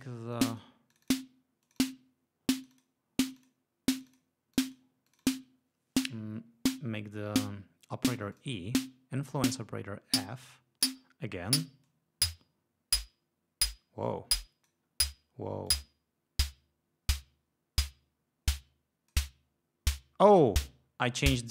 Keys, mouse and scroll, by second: 0.4 click, 1.0-1.4 drag, 1.7 click, 2.6 click, 3.3 click, 4.0 click, 4.6 click, 5.1-5.6 drag, 8.4 click, 9.6-11.1 drag, 11.9-14.9 drag, 15.7-19.4 drag.